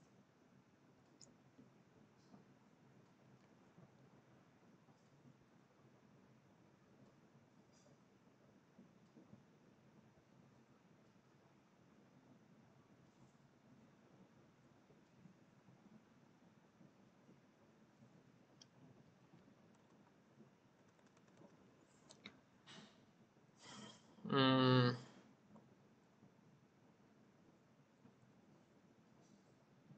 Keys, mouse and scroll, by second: 5.4 click, 13.3 click, 19.6 alt+Tab, 20.6 alt+Tab, 20.8 alt+Tab, 23.4 click, 24.4 click, 26.0 click, 28.2 click.